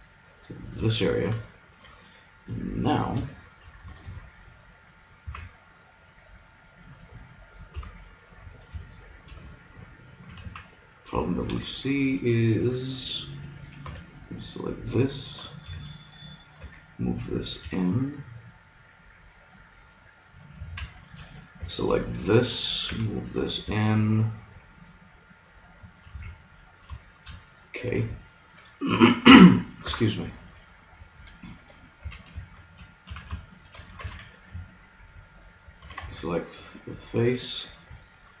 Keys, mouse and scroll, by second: 2.2-4.0 middle drag, 4.0 ctrl+Tab, 5.3 z, 7.7 KP_1, 10.4 z, 13.8 b, 15.4-17.7 middle drag, 16.6 g, 20.4-22.8 drag, 20.5 a, 21.6 b, 22.9 g, 26.1 a, 27.1-29.2 middle drag, 29.3 a, 29.8 KP_Enter, 29.8 KP_Decimal, 30.6 middle click, 32.0 a, 33.1 z, 34.0 ctrl+Tab, 36.0 ctrl+Tab, 37.2-38.4 right drag.